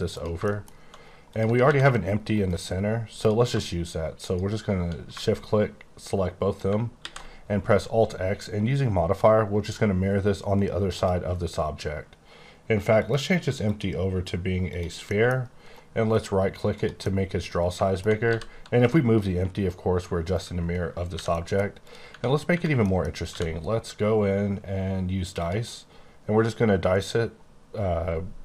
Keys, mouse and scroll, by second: 0.1 click, 0.5 middle click, 0.6-0.9 scroll down 1, 1.3 click, 1.6 g, 2.3 right click, 3.1 click, 7.0 x, 9.6 click, 10.9 click, 13.0 click, 13.6 click, 14.7 click, 15.0 middle click, 15.6 right click, 16.1 click, 16.7 click, 16.9 scroll down 1, 17.0 middle click, 18.2 g, 20.2 right click, 21.1 h, 21.3 middle click, 21.5 scroll down 1, 21.8 click, 22.0 Tab, 22.5 Tab, 22.8 middle click, 23.2 q, 25.4 click, 26.9-28.4 scroll up 14.